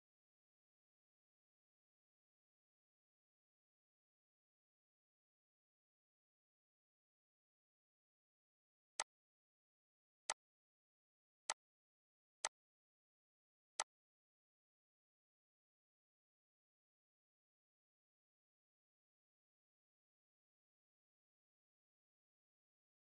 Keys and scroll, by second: 3.8 ctrl+d, 7.3 ctrl+g.